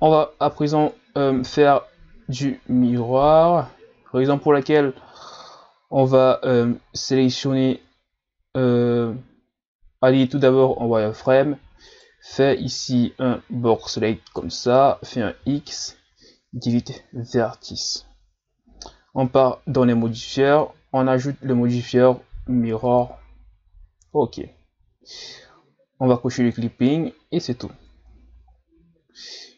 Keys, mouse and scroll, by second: 0.6-2.2 scroll down 1, 2.2-3.4 scroll down 1, 3.4-5.1 scroll down 1, 5.1-6.2 scroll up 1, 6.2-8.1 scroll up 1, 11.9 right click, 12.3 b, 19.2 Tab, 20.5 click, 26.4 click, 27.4 click, 28.0 Tab.